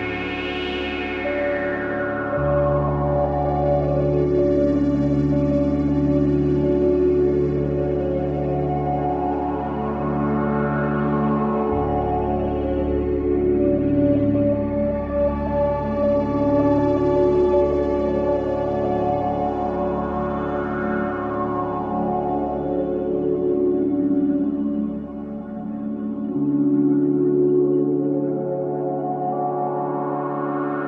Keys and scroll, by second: 0.4 3, 14.6 4, 16.6 3.